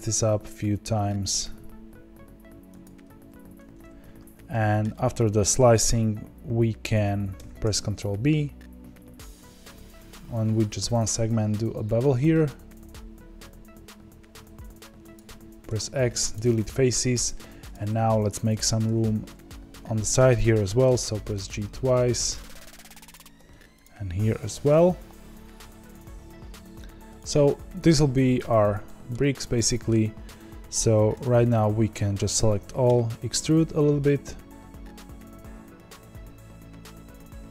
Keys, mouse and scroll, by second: 3.7-4.5 scroll up 4, 4.5-7.3 shift+middle drag, 7.3 ctrl+b, 16.3 x, 17.7 click, 19.8 b, 20.9 g, 23.8 click, 24.5 g, 28.8-31.1 shift+middle drag, 31.1 a, 32.8 e.